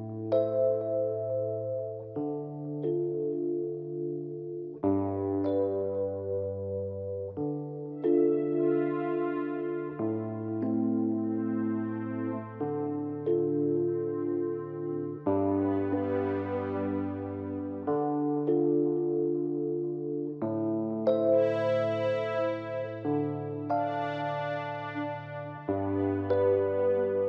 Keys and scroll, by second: 9.1 ctrl+z, 21.2 ctrl+i.